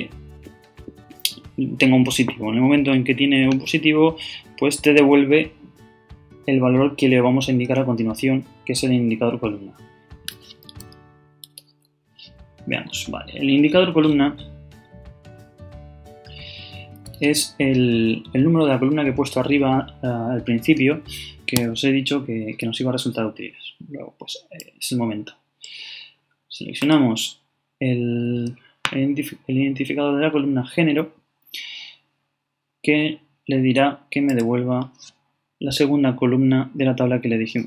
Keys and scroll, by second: 11.4 shift+,.